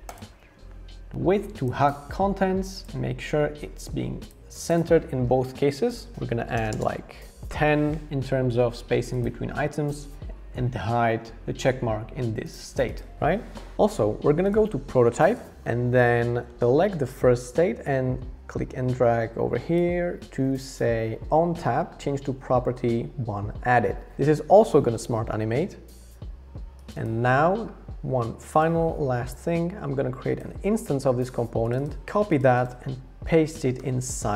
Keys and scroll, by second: 6.1-7.0 typing, 32.0 super+x, 33.8 super+v.